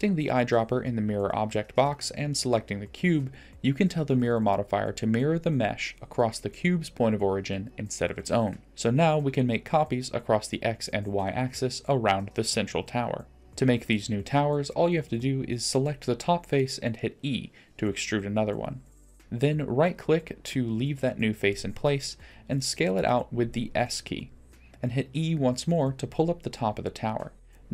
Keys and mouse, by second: 7.8-8.7 drag, 8.7-9.8 middle drag, 10.7 click, 11.5 click, 12.3-13.4 middle drag, 14.3 click, 16.9 e, 19.2 s, 21.7 e, 24.7 i.